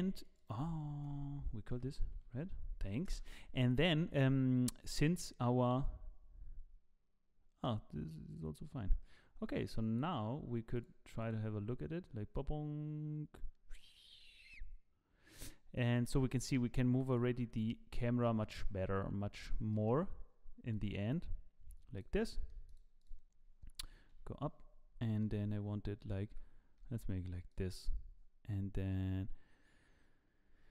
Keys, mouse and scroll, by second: 0.3 click, 0.4 click, 4.8 click, 10.7 click, 11.2 click, 15.8 click, 17.1 click, 18.0 z, 18.2 middle click, 18.6 scroll down 5, 19.3 click, 19.7 middle click, 20.7 click, 22.2 middle click, 22.7 click, 23.0 click, 24.1 KP_7, 24.7 scroll down 2, 25.0 shift+middle click, 25.4-26.1 scroll up 1, 26.1 scroll up 1, 26.3 g.